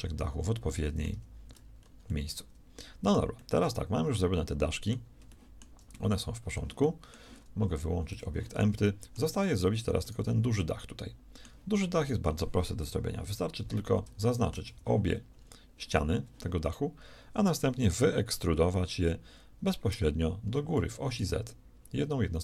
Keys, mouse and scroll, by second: 0.3 a, 1.1 z, 8.1 middle click, 12.7 shift+KP_1, 14.6 shift+z, 19.9 e.